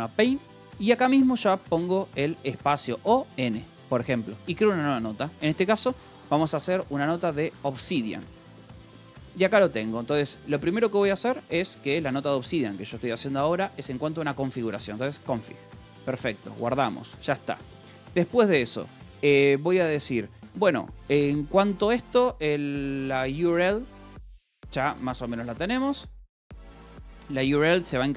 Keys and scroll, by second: 0.0-2.2 typing, 3.7 n, 6.4-7.6 typing, 7.8 Return, 9.1-12.2 typing, 14.4-15.7 typing, 16.9 ctrl+j, 18.1 a, 18.3 Escape, 19.1 o, 19.7 Return, 23.0-23.9 typing, 25.3 space, 26.2 Escape, 26.8 a.